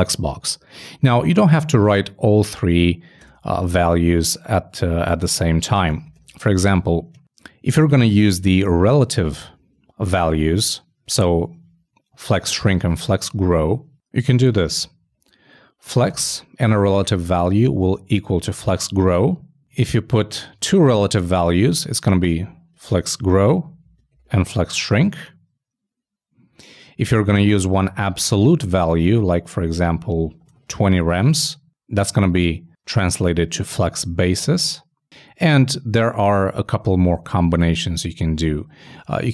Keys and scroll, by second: 6.0-6.9 typing, 22.9 shift+Left, 23.1 shift+Right, 24.2 shift+Right, 29.1 shift+Left, 29.2 shift+Right, 30.4 shift+2, 38.5 alt+Left.